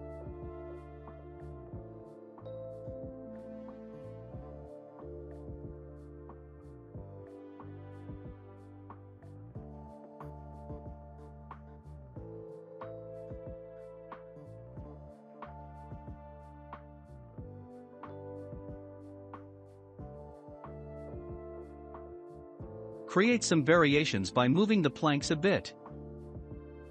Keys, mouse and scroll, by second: 1.1-2.2 shift+middle drag, 2.2-2.8 scroll up 1, 2.8 Tab, 4.3 click, 6.1-9.1 drag, 9.3-9.7 scroll down 2, 9.7 click, 10.0 Tab, 10.3 click, 10.7-11.6 scroll down 3, 11.6-14.0 shift+middle drag, 14.0-14.5 scroll down 1, 14.6-16.3 shift+middle drag, 16.3 scroll down 1, 18.5 scroll down 1, 18.6-19.5 scroll up 3, 19.0-19.5 middle drag, 20.0-21.9 scroll down 1, 21.9-26.5 drag.